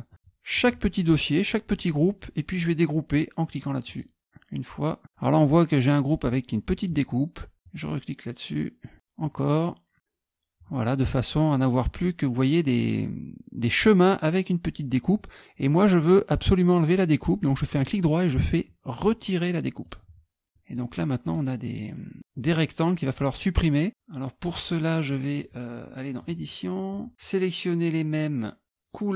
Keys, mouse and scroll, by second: 0.1 click, 0.6 click, 3.9 click, 7.6 click, 9.2 click, 17.8 right click, 19.8 click, 20.5 middle click, 21.2 click, 22.3 click, 25.1 middle click, 26.2 click.